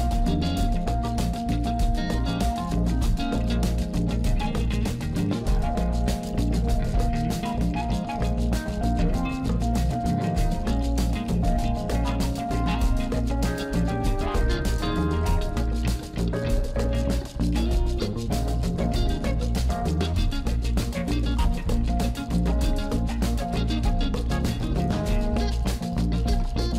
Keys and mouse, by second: 0.5-3.9 middle drag, 4.7 alt+shift+click, 5.1 middle click, 5.4 KP_1, 5.8 shift+middle click, 6.5 Tab, 6.8 Tab, 7.2 click, 8.0 shift+z, 8.6 click, 9.2 s, 10.5 Tab, 10.9 shift+z, 11.8 Tab, 12.3 shift+z, 12.7 click, 13.2 s, 14.7 s, 15.4 shift+z, 15.6 Tab, 16.2-17.0 middle drag, 17.2 KP_1, 17.6 shift+z, 18.0 shift+z, 18.2 shift+z, 18.5 Tab, 19.0 click, 19.6 s, 20.1 z, 20.4 click, 20.6 ctrl+z, 20.9 ctrl+z, 21.2 click, 21.6 s, 22.5 shift+z, 22.7 Tab, 23.2 middle click, 24.0 KP_1, 24.7 middle click, 25.2 Tab.